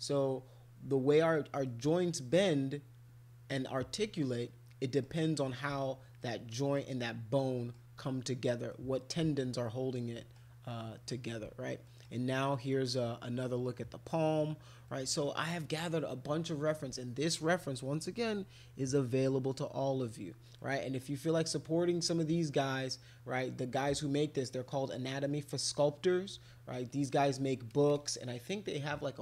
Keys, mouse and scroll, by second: 1.6 middle click, 4.0-5.0 middle drag, 6.2-7.7 middle drag, 8.0 middle click, 8.7-10.3 middle drag, 10.7 middle click, 11.8 middle click, 14.8 middle click, 20.6 middle click, 24.5 middle click.